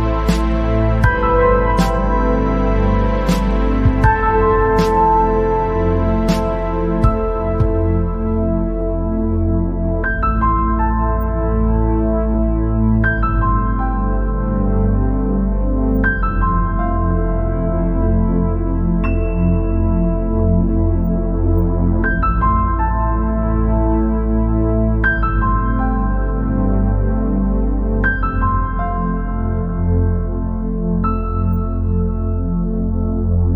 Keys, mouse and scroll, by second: 0.4-0.8 scroll down 2, 0.9 click, 1.4 scroll down 2, 1.6 middle click, 2.1-2.5 scroll up 2, 2.6-3.7 middle drag, 3.7 scroll down 1, 3.8-6.5 middle drag, 6.5-6.9 scroll up 1, 6.9-7.8 scroll down 5, 8.0 scroll up 3, 9.2 scroll down 2, 9.5 scroll up 3, 10.0-11.4 middle drag, 11.4 scroll down 3, 11.8-12.2 scroll up 2, 12.2-15.2 middle drag, 18.1 scroll up 2, 19.2 alt+click, 20.2 alt+click, 21.4 alt+click, 22.3 click, 23.0 click, 24.4 alt+click, 26.2 shift+click, 27.1 alt+shift+click, 29.4 ctrl+b.